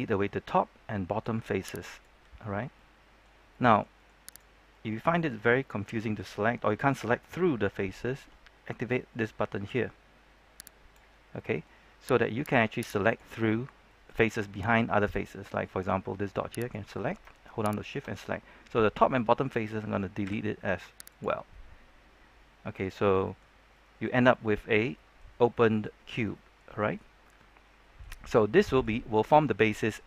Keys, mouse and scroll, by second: 0.5 middle click, 1.9 shift+right click, 2.7 middle click, 4.2 right click, 4.6 middle click, 5.2-5.5 scroll down 1, 5.5 middle click, 7.0 scroll up 1, 7.3 shift+middle click, 10.6 click, 11.3 middle click, 11.5-12.3 scroll up 1, 12.3 right click, 13.3 middle click, 16.5 right click, 17.7 shift+right click, 18.1-19.5 middle drag, 20.2 x, 21.0 click, 21.4-23.0 middle drag, 23.0 scroll down 1, 23.2 middle click, 23.5 scroll up 1, 23.7 middle click, 24.6-24.9 scroll up 1, 24.9 middle click, 26.1 scroll down 1, 26.3 shift+middle click, 27.1 scroll down 1, 27.3 middle click, 28.3 scroll down 1, 28.5 middle click, 29.0 scroll up 1, 29.2-30.0 middle drag.